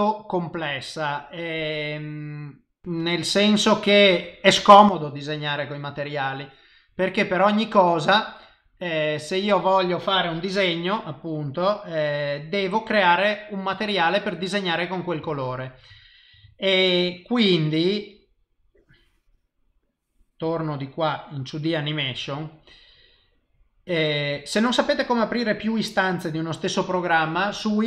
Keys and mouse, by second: 2.5 middle click, 14.4 middle click, 15.3 shift+middle click, 15.9 ctrl+middle click, 16.4 middle click.